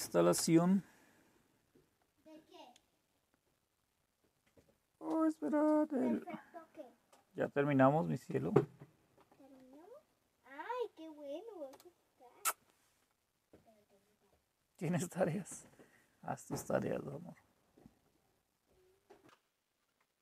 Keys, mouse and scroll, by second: 0.4 Return, 9.2 Down, 9.5 Up, 11.7 Return.